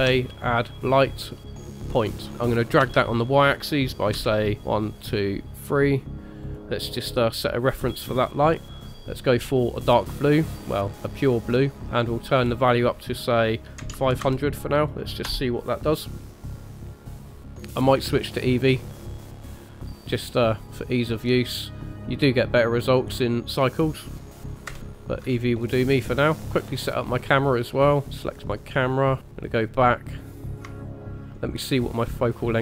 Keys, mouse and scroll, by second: 2.8 g, 6.6 space, 8.8 click, 12.3 click, 14.2 KP_0, 16.1 click, 18.6 click, 19.3 click, 21.2 middle click, 22.8 click, 23.5 middle click, 24.6 KP_0, 25.3-25.9 scroll down 2, 25.9 scroll up 2, 26.4 click, 28.1 click, 28.6 click, 29.1 click, 29.4 click, 30.6 click, 32.5 click.